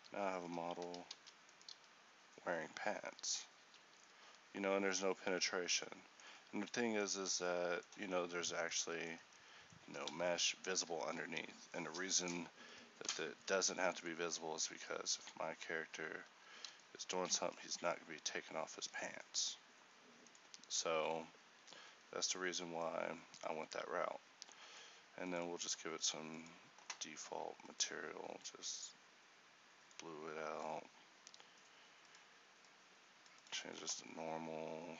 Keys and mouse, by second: 0.1 g, 1.3 ctrl+Tab, 1.8 g, 4.3 r, 7.3 a, 10.1 z, 12.2 a, 13.1 z, 14.3 a, 15.3 r, 17.5 g, 20.7-34.9 drag.